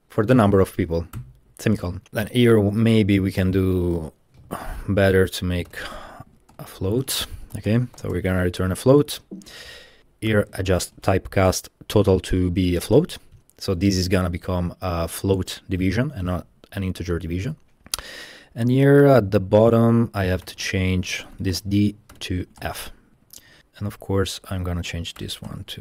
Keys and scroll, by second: 1.2 shift+,, 2.0 Page_Down, 2.2 Escape, 4.4-8.5 typing, 9.9-13.5 typing, 17.5 Escape, 20.5-23.0 typing, 23.2 shift+Escape, 23.6 Left, 23.8 Left, 23.8 Left, 25.2-25.8 typing.